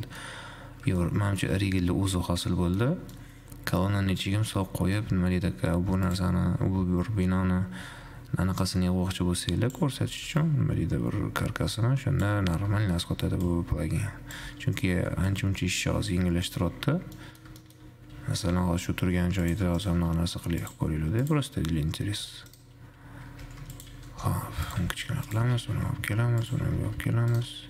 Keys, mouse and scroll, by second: 0.7-1.2 scroll up 4, 1.2-3.2 shift+middle drag, 3.2 scroll down 4, 3.4-5.2 middle drag, 5.2-6.2 scroll up 2, 6.2 click, 8.4 shift+z, 8.8-10.3 drag, 10.3 shift+z, 10.7-13.2 drag, 13.2 shift+z, 13.7-14.7 drag, 14.7 shift+z, 15.5-16.9 drag, 16.9-17.4 scroll down 11, 17.4-18.2 middle drag, 18.2 scroll up 1, 18.5 shift+a, 20.2 shift+a, 22.2 s, 25.7 g, 27.0 s.